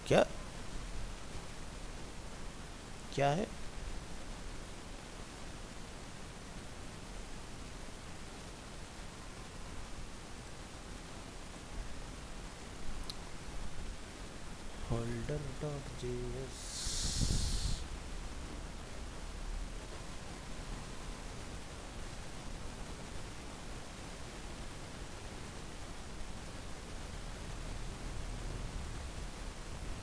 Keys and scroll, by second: 29.6 ctrl+c.